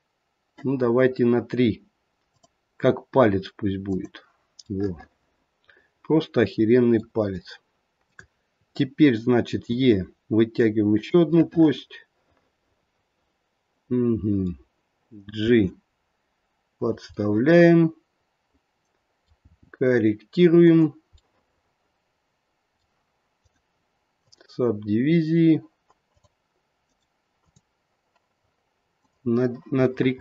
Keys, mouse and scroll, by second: 2.3 click, 3.9 click, 4.6 middle click, 5.1 middle click, 8.1 click, 9.6 e, 11.3 middle click, 15.4 g, 17.3 middle click, 17.7 middle click, 18.1 middle click, 19.3 g, 21.3 middle click, 23.3 right click, 26.1 click, 26.8 right click, 28.9 click, 29.8 middle click, 29.9 middle click.